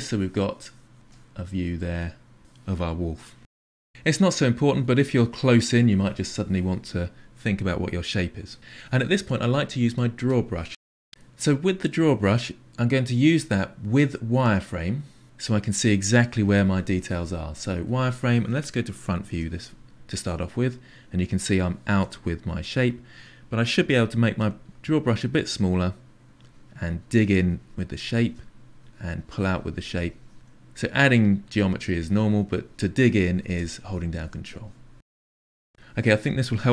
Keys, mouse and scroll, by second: 4.3-10.3 middle drag, 10.3 click, 11.1-14.5 middle drag, 17.8 click, 19.2 KP_1, 20.6-23.7 ctrl+middle drag, 23.7 f, 26.2-28.0 ctrl+drag, 28.7-30.9 drag, 31.3 ctrl+click, 33.0 ctrl+click, 33.7 ctrl+click, 34.4 shift+click, 36.3-36.7 drag.